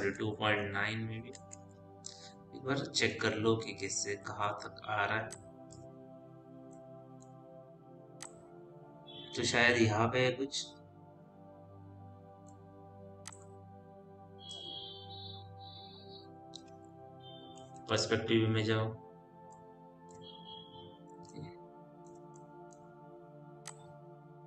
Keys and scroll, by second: 0.0 ., 0.6 KP_9, 1.2 Return, 3.0 t, 17.0 f, 18.1 p.